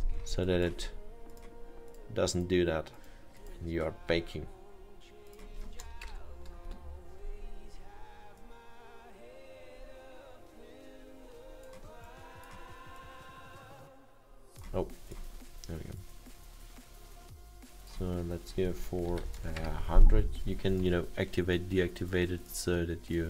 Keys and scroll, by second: 0.1 Return, 5.8-6.6 typing, 6.7 Return, 18.9-19.8 typing.